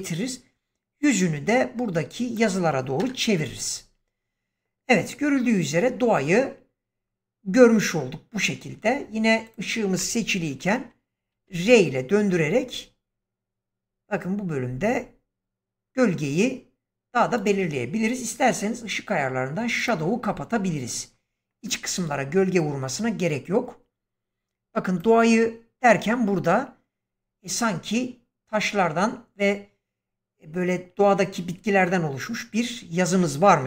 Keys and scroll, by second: 2.9 0, 11.4 r.